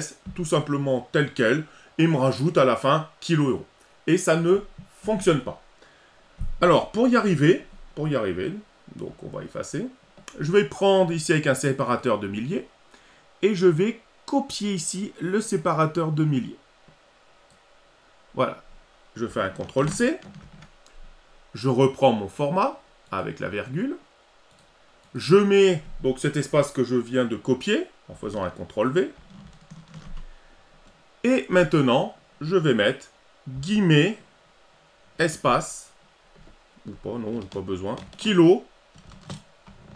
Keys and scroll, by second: 19.8 ctrl+c, 29.2 ctrl+v.